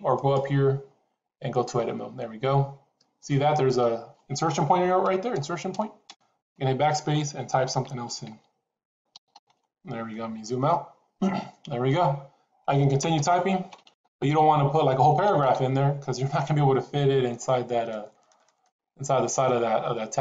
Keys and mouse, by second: 0.0-1.6 drag, 5.3 BackSpace, 5.6 BackSpace, 6.0 BackSpace, 6.3 BackSpace, 8.0-9.5 typing, 13.5-18.6 typing.